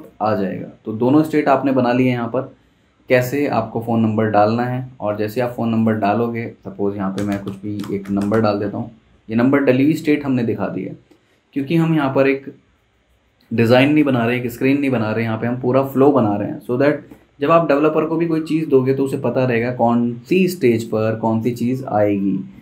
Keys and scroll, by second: 6.9-8.8 typing, 8.8 Escape.